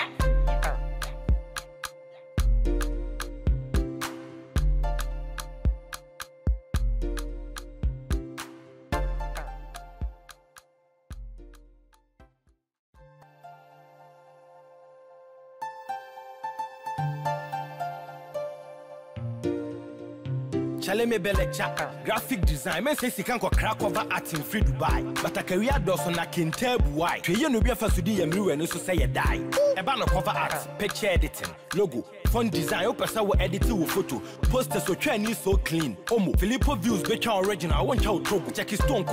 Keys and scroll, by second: 1.3 ctrl+t, 2.6 ctrl+0, 23.9 ctrl+0, 25.7 ctrl+-, 37.3 ctrl+-.